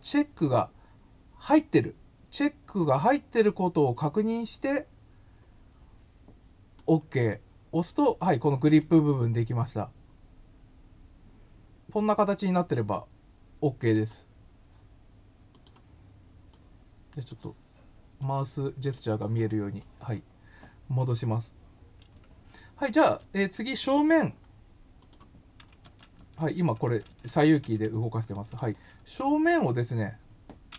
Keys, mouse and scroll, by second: 16.7 click, 17.2 click, 18.1 click, 24.9 click.